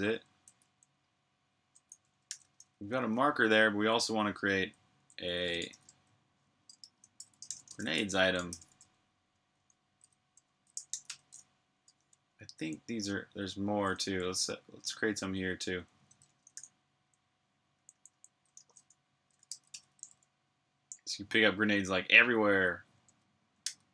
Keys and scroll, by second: 0.0-0.4 typing, 1.5-12.9 typing, 13.9-15.0 typing, 16.1-19.0 typing, 23.4 super+b, 23.6-23.9 typing.